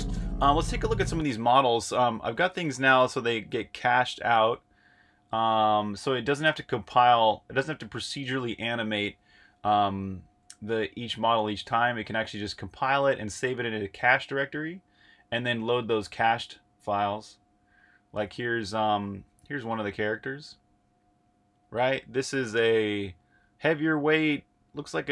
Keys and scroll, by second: 0.0-0.1 typing, 0.8 super+q, 2.4 super+Tab, 19.5 8.